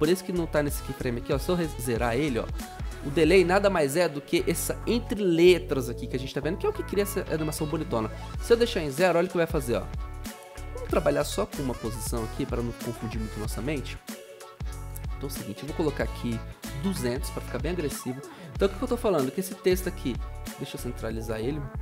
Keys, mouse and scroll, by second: 7.7 Return, 9.1 typing, 13.1 Return, 16.3-17.3 typing.